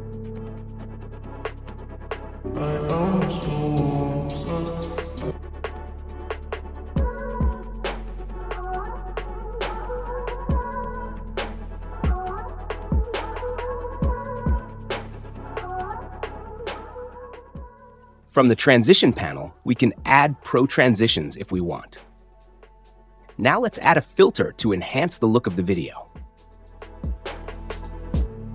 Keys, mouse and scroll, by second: 1.2-2.2 drag, 8.5-9.5 drag, 10.8-11.8 drag, 14.4-15.4 drag, 16.3-17.4 drag, 25.1-26.1 drag.